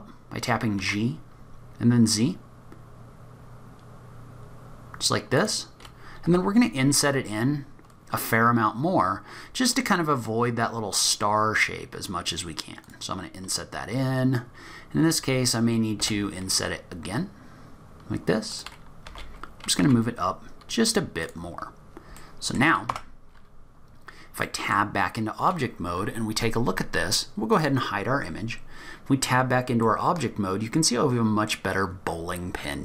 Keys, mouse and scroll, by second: 6.3 i, 13.5-14.1 scroll up 1, 14.1-16.0 scroll down 1, 16.0 scroll down 1, 16.0 i, 21.0 g, 21.6-22.3 scroll down 8, 22.2 middle click, 22.9 Tab, 23.3-24.4 scroll down 2, 23.7-24.4 scroll up 1, 24.4 middle click, 24.4-25.9 scroll up 4, 28.0 click, 28.4-29.5 scroll up 3, 29.5-30.2 scroll down 4, 29.8 middle click.